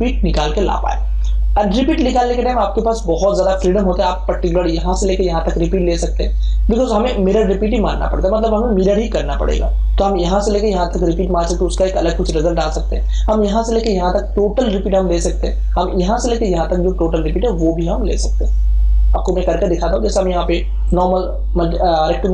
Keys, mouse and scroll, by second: 2.4-12.4 drag, 20.8 click.